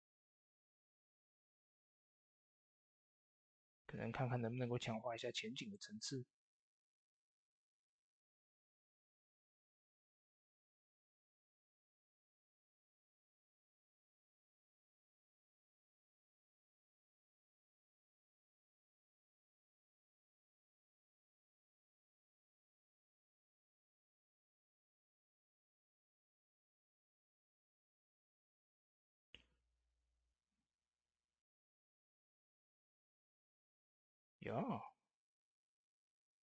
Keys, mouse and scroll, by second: 3.3 click, 3.3-8.0 drag, 8.7 click, 8.7-15.9 drag, 17.0-25.9 drag, 27.0 click, 32.0 click, 32.0 click, 32.4-32.9 scroll down 1, 32.9 click, 33.9 ctrl+s.